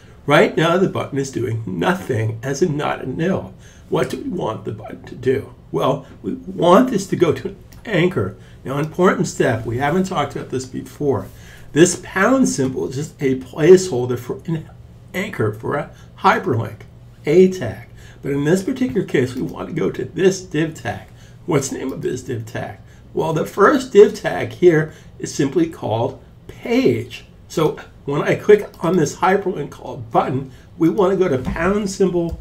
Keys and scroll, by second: 31.3-32.4 typing.